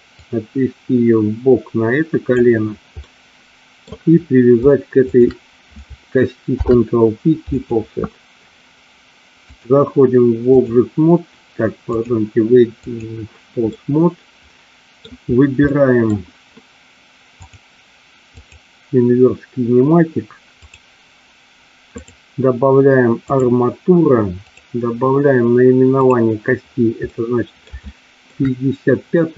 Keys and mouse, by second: 0.3-2.4 drag, 3.2 middle click, 6.6 ctrl+p, 9.6-10.9 drag, 12.1-13.2 drag, 13.8-15.1 middle drag, 15.8 middle click, 17.4 click, 18.6 click, 20.8 click, 22.1-23.6 drag, 24.6 click, 26.1 click, 27.2 middle click, 28.0 shift+middle click.